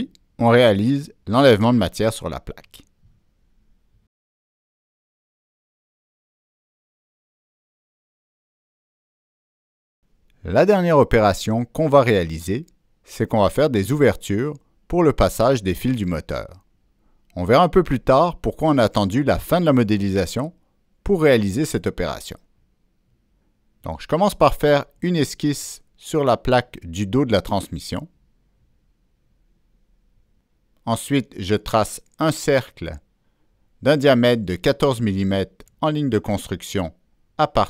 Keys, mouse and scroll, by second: 2.2 click, 3.2 click, 4.2 click, 5.4 middle click, 5.6 click, 6.0-9.0 middle drag, 9.3 middle click, 9.8 scroll down 1, 11.9 middle click, 24.0 click, 24.2 middle click, 24.9 click, 25.0 middle click, 26.4-26.7 scroll up 1, 27.0-27.3 scroll down 1, 29.3 right click, 31.0 click, 31.5 click, 31.6 right click, 32.2 Escape, 33.2 right click, 33.4 Escape, 33.4 click, 33.6 Escape, 33.6 click, 34.2-35.2 drag, 34.8 Escape, 34.8 right click, 35.5 Escape, 35.5 right click, 36.6 Return, 37.5 Return, 37.5 Escape, 37.5 right click, 37.5 click.